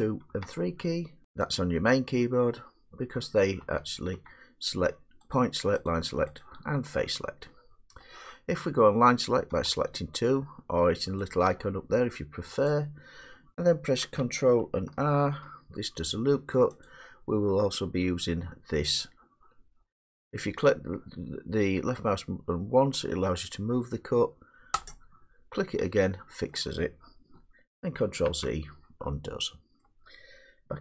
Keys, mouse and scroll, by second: 0.0-0.3 typing, 3.0-4.1 typing, 5.3 click, 5.8 click, 6.4 click, 8.0 middle click, 9.5 2, 11.2 click, 12.7 click, 13.5 middle click, 15.2 ctrl+r, 16.8 click, 24.9 click, 26.5 middle click, 28.0 ctrl+z, 29.8 middle click.